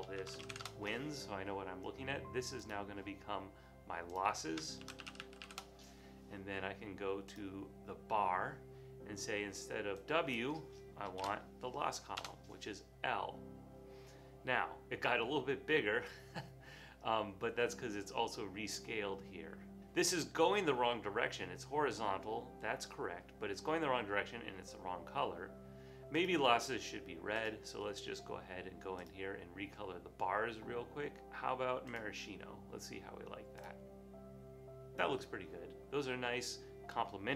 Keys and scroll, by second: 0.1-1.0 typing, 4.8-5.9 typing, 11.3 l, 12.2 Return.